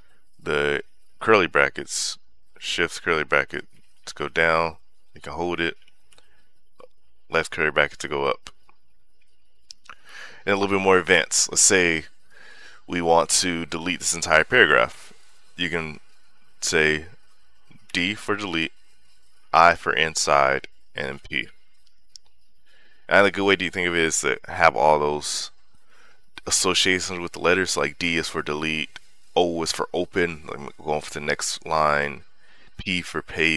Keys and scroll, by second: 2.3-4.9 typing, 6.4 {, 9.9 j, 18.3 d, 19.4 i, 21.0 p.